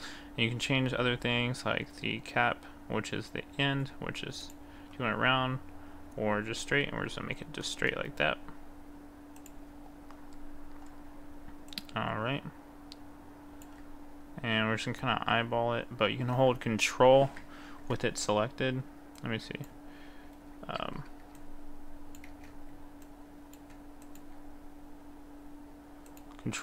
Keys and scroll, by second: 21.4 ctrl+z.